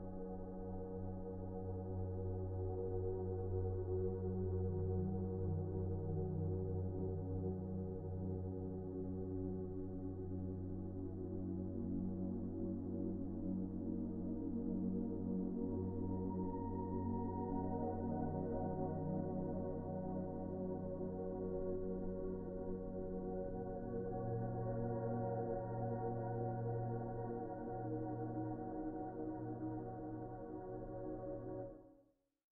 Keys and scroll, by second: 8.0 p.